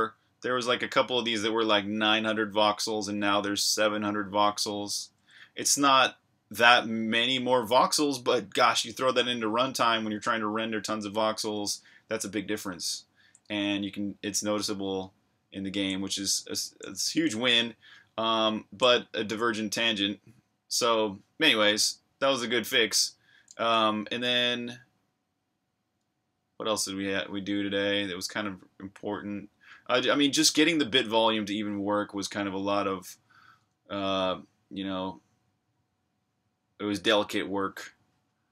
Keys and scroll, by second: 13.5 super+Tab, 17.0 super+Tab.